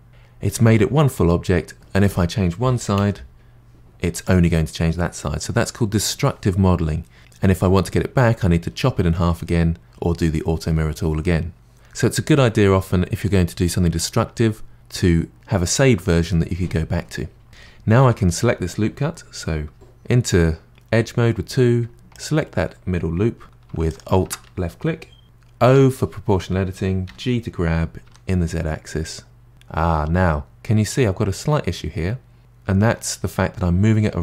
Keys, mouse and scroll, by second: 0.1 middle click, 2.0 click, 2.9 g, 18.0 2, 22.1 click, 23.9 alt+click, 25.7 o, 27.1 g.